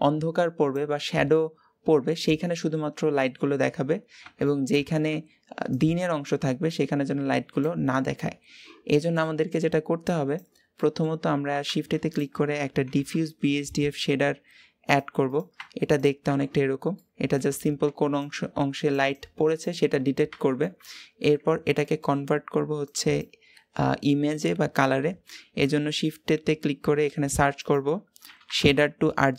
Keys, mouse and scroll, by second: 8.1-8.5 scroll down 2, 9.9-15.7 drag, 16.5 scroll up 1, 16.7 middle click, 17.5-20.4 scroll up 1, 20.4-29.3 middle drag.